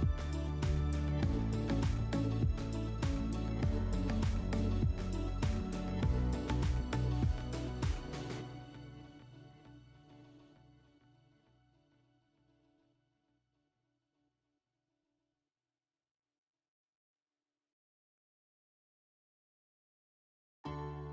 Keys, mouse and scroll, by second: 7.7-9.2 drag, 9.6-11.2 drag, 11.2-14.2 drag, 15.7 click, 16.6 click, 18.1 /.